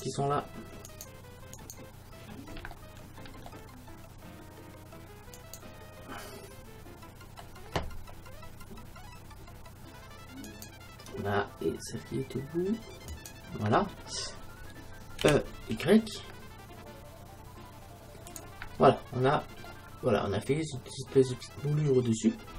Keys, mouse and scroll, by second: 2.8 middle click, 5.4-7.3 right drag, 10.5-12.4 right drag, 13.2-15.0 right drag, 15.3 e, 18.5 click, 18.7 e, 18.8 middle click, 18.9-20.2 drag, 19.7-20.8 middle drag.